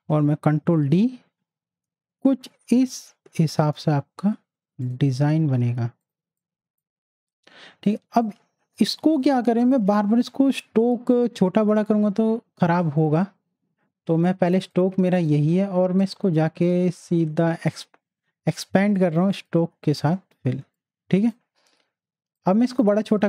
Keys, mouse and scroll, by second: 0.3 ctrl+d, 4.8-11.0 drag, 20.5 z, 20.7-23.2 drag.